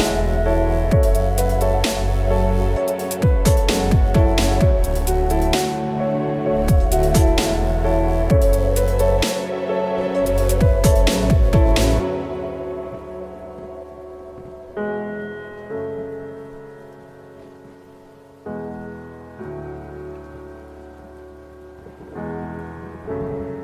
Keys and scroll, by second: 8.1 p, 18.8 ctrl+z, 22.9 ctrl+Return, 23.5 ctrl+shift+Return.